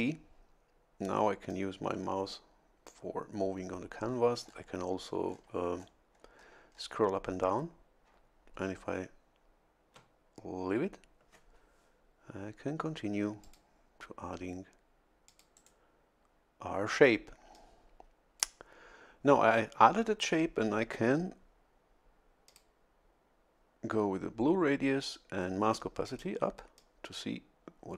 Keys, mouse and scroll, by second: 1.5-3.1 drag, 4.5 scroll down 1, 5.3 scroll down 1, 5.8-6.6 scroll up 2, 6.7 scroll up 1, 13.4 click, 15.3 click, 15.6 right click, 17.5-18.6 drag, 22.5 click, 26.1 click, 26.8-27.9 drag.